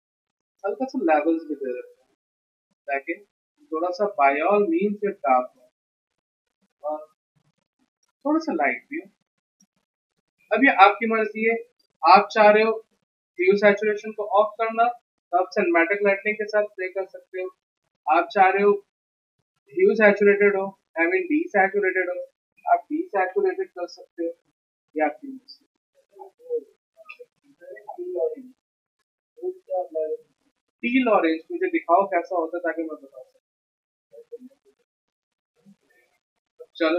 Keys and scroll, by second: 10.8 v, 36.1 alt+Tab.